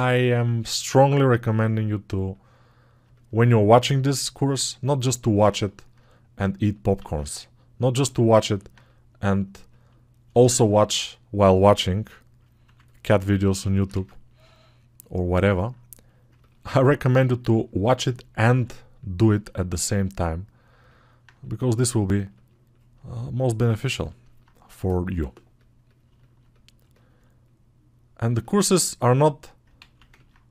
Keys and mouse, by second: 7.0-13.4 drag, 13.9 ctrl+z, 17.5-20.8 alt+drag, 20.8 right click, 21.1-22.3 drag, 30.0 ctrl+alt+q.